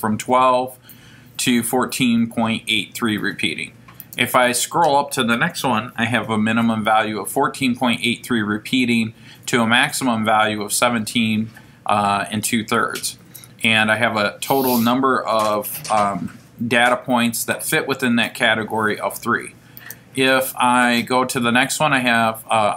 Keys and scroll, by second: 4.0 Right.